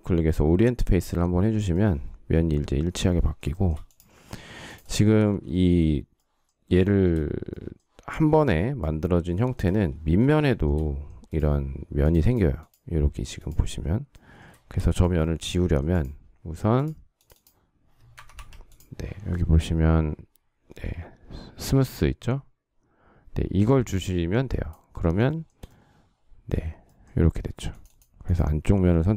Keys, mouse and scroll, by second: 3.2 shift+middle click, 5.2 shift+middle click, 6.7 shift+middle click, 9.0 shift+middle click, 10.2 shift+middle click, 14.9 shift+middle click, 15.1 shift+double middle click, 17.8 Escape, 25.0 shift+middle click.